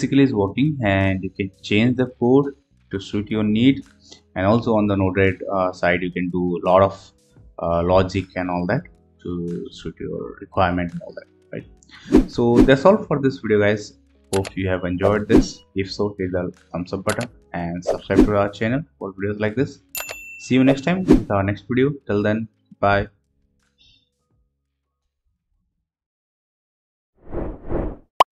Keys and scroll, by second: 0.8 alt+Tab, 4.0 Tab, 5.2 alt+Tab.